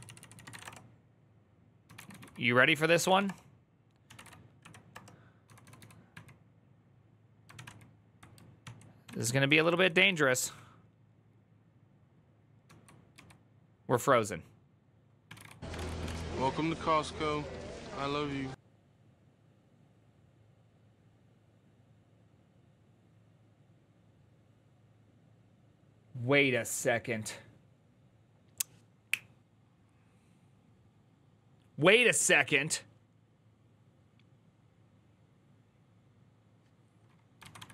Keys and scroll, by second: 0.0-5.7 typing, 4.7 Return, 7.1-7.8 typing, 8.8 ctrl+w, 8.9 ctrl+o, 9.0-10.7 typing, 12.4-12.9 typing, 14.8-16.3 typing, 37.2 ctrl+a, 37.3-37.7 typing.